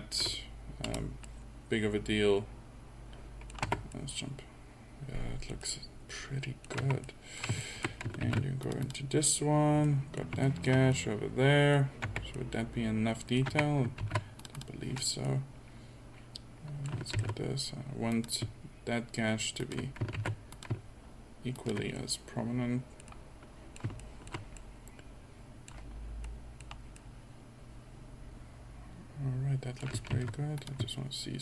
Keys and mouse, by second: 1.5 middle click, 2.4 middle click, 3.2 middle click, 3.7 Tab, 5.6 middle drag, 5.9 middle click, 6.8 Tab, 7.7 middle click, 8.3 ctrl+r, 12.1 Tab, 13.6 Tab, 14.1 ctrl+r, 17.2 ctrl+r, 20.2 ctrl+r, 24.6 middle click, 30.1 ctrl+r.